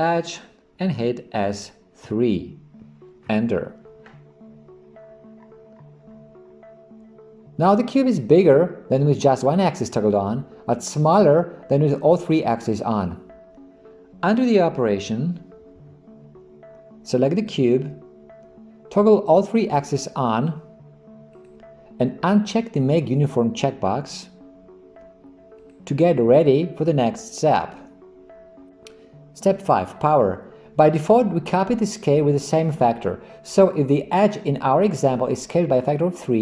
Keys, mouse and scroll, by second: 0.3 click, 1.4 s, 15.8 ctrl+z, 17.4 click, 21.4 click, 25.6 click.